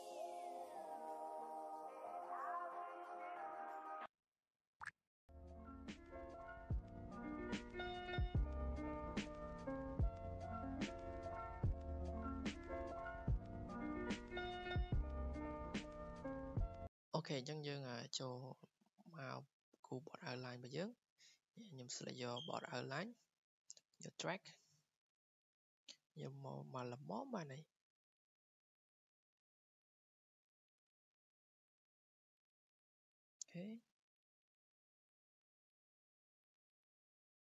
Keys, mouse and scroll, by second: 0.2 click, 1.0 click, 1.1 Escape, 2.5 typing, 3.2 click, 3.3 Escape, 4.1 click, 4.2 Escape, 4.8-5.8 typing, 6.1 click, 6.2 Escape, 7.1 r, 7.5 r, 8.2 Escape, 8.2 click, 9.5 typing, 11.0 click, 11.1 Escape, 11.5 click, 11.6 click, 12.2 ctrl+click, 12.4 click, 13.4 ctrl+click, 13.6 click, 13.8 scroll, 14.4-15.3 scroll, 15.3 click, 15.7 click, 15.9 Delete, 16.4 Delete, 16.4 click, 17.1-17.5 drag, 18.3 click, 20.1 scroll down 2, 21.4 scroll, 21.8 click, 23.4 scroll down 2, 23.7 click, 29.1-34.7 drag, 36.1-36.4 scroll, 37.1-37.5 middle drag, 37.2-37.5 scroll.